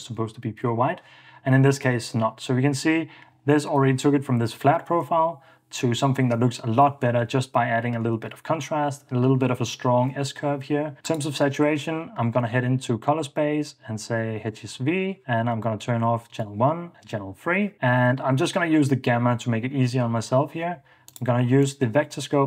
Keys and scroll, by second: 0.2 super+d, 5.1 super+d, 6.7 ↻.